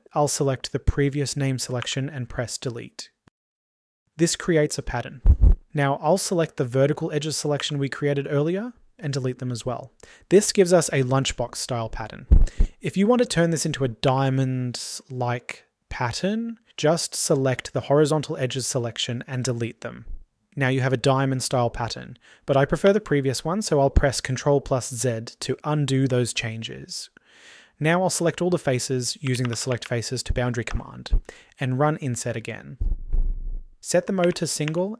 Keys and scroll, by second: 1.4 Delete, 13.7 Delete.